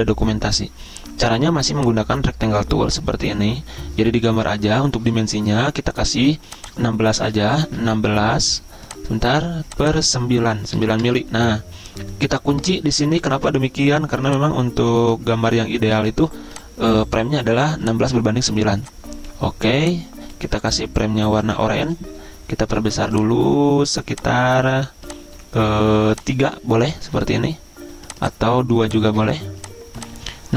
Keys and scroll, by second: 7.5 typing, 10.8 9, 11.0 Return.